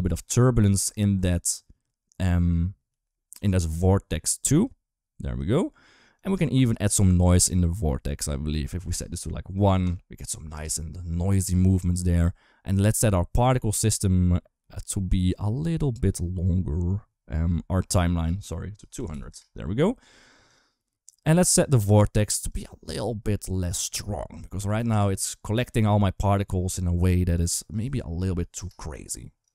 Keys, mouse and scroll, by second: 2.7 g, 4.5 click, 6.0 click, 6.6 click, 8.0 click, 9.7 click, 13.2 click, 15.4 click, 18.0-19.1 drag, 18.9 0, 20.3 click, 20.9 click, 22.3 click, 23.5-24.7 drag, 27.3-28.4 drag.